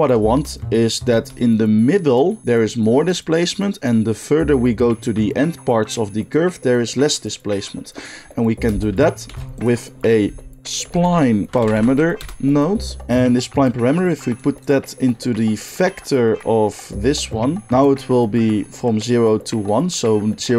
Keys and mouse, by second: 9.2 shift+a, 11.6 Down, 11.7 Down, 13.0-14.6 drag, 17.1-20.5 drag.